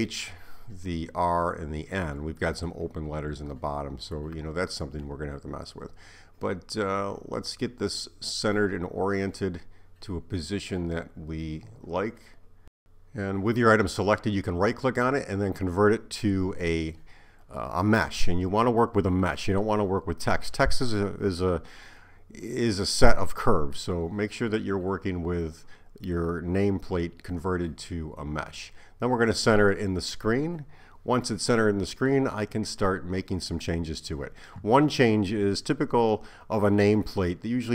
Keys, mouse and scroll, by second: 0.4 click, 0.9 click, 2.3 click, 2.9 click, 3.5 click, 3.7 click, 4.6 click, 5.5 click, 6.5 click, 7.9 Tab, 9.0 click, 9.8 Tab, 10.3 Tab, 11.1 Tab, 11.7 Tab, 13.4 right click, 16.3 Tab, 17.7 a, 18.3 a, 18.8 a, 19.5 Tab, 20.5 right click, 26.2 shift+s, 35.2 Tab.